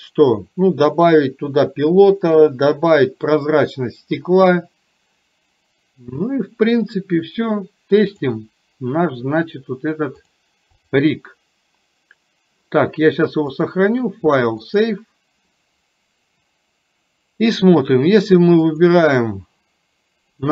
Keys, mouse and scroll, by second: 8.0 click, 10.9 click, 13.8-15.0 drag, 18.8 click.